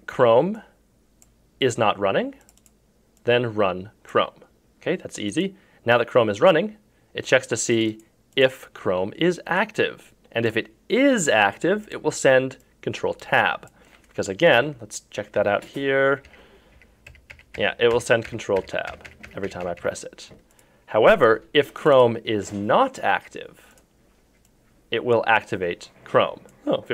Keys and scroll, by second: 14.6 F4, 15.4 F3, 16.3 F2.